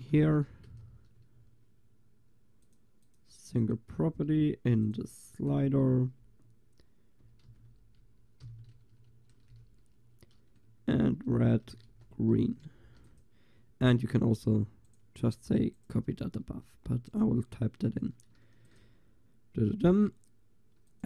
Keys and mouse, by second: 2.7-9.1 drag, 9.1 shift+2, 12.8 ctrl+s, 18.5 ctrl+s, 18.9-21.0 drag.